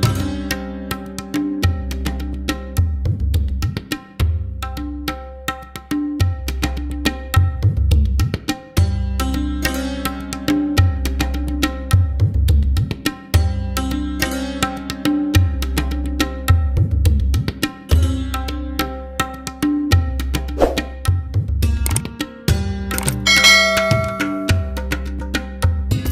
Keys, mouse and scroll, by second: 3.2 scroll up 1, 5.5-7.2 scroll up 4, 7.2-8.9 shift+middle drag, 8.9-9.4 scroll down 2, 9.7-10.6 scroll down 1, 10.6-13.7 middle drag.